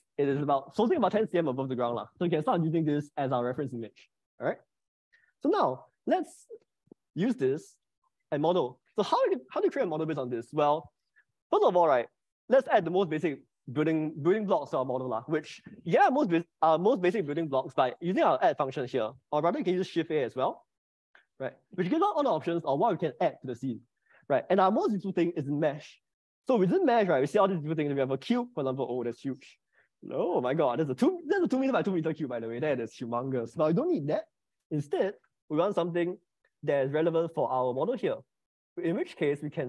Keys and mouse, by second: 7.5 shift+middle click, 20.0 shift+a, 21.1 shift+a, 30.7 middle click, 34.1 Delete, 35.9 middle click.